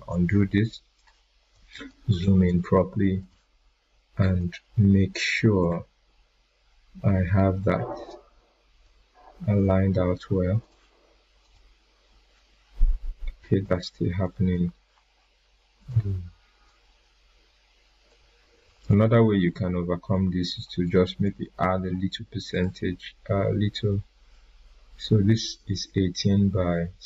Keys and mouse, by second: 0.9-2.1 drag, 11.5 click, 12.3 ctrl+z, 13.6-19.2 drag, 16.9-17.5 click, 18.2-19.2 drag, 19.5 right click, 21.2-21.8 click.